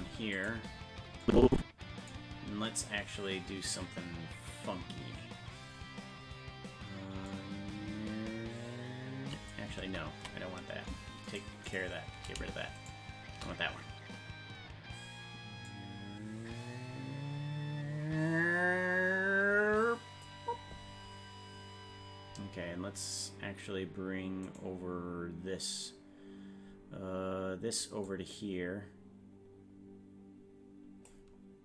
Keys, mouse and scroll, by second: 1.2 click, 5.3 scroll down 1, 5.8 scroll down 3, 7.3-9.5 drag, 9.9 ctrl+z, 11.3 shift+right click, 15.7-20.3 drag, 24.6 right click, 28.1-31.1 drag.